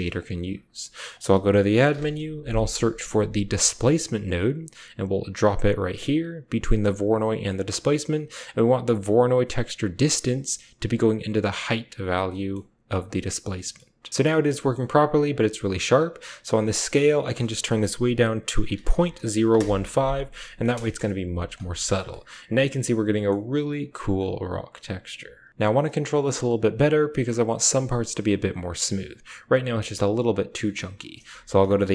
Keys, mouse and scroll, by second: 0.3 shift+a, 4.3-6.9 typing, 5.9 click, 7.4 middle click, 10.1-11.5 drag, 11.2-13.6 typing, 12.1 click, 12.8 click, 13.3 click, 14.1 click, 14.3 shift+drag, 20.2 drag, 20.8 KP_0, 21.9 middle click, 22.9-23.3 shift+middle drag, 24.1 middle click, 25.5 click, 27.0 drag, 31.2 shift+a.